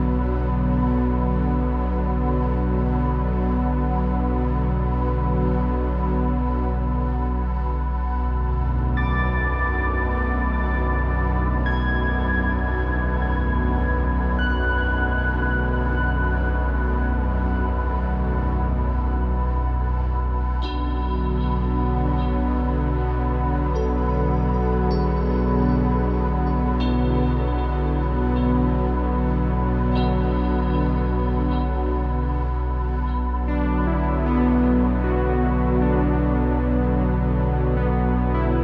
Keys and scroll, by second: 2.6 Tab, 2.7-4.4 typing, 11.1 1, 12.9 1, 14.4 Return, 16.4-18.6 typing, 21.3 Return, 24.1-25.0 typing, 28.9 ⟲, 31.8 b, 32.3 Return, 33.3-34.4 typing.